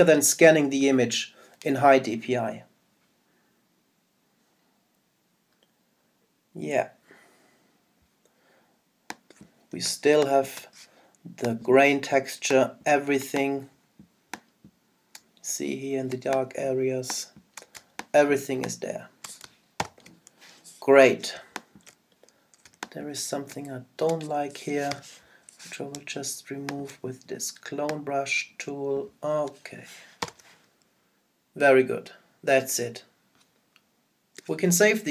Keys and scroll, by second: 9.9 super+space, 19.8 super+0, 22.3 super+space, 30.2 super+0.